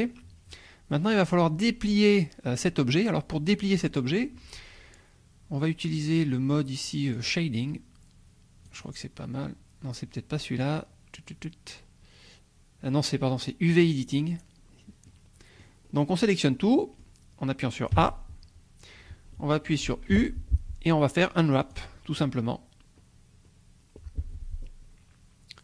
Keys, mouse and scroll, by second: 7.1 click, 8.6 click, 13.7 click, 14.6-15.1 scroll up 1, 15.1 middle click, 15.8 scroll up 1, 16.7 middle click, 17.9 a, 20.1 u, 21.6 click, 23.0-24.8 scroll up 2.